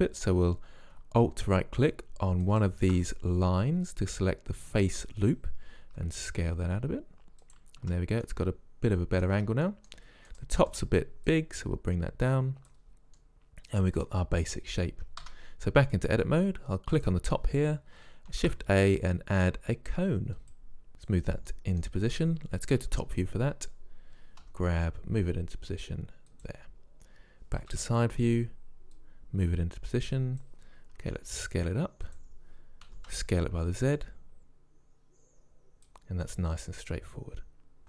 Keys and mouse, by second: 2.5-4.2 right drag, 4.2 middle click, 5.9 s, 7.9 Tab, 8.3 drag, 9.4 Tab, 11.3-12.5 right drag, 12.5 click, 13.8-15.2 drag, 15.3 Tab, 17.0-18.4 drag, 18.4 shift+a, 21.5-22.5 drag, 22.5 middle click, 22.9-23.3 drag, 22.9 KP_7, 24.5 g, 27.7 KP_1, 29.0-30.8 drag, 31.1 s, 33.0 s, 34.4-36.2 drag, 37.3 middle click.